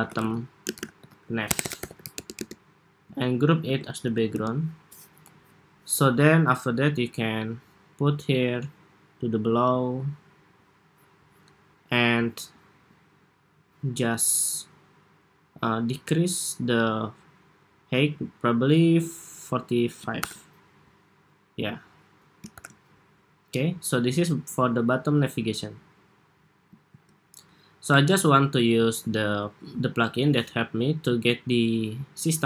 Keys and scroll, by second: 2.9 super+g, 3.5 super+r, 19.9 super+-, 22.2 super+=, 26.6 super+s, 29.3 ↺.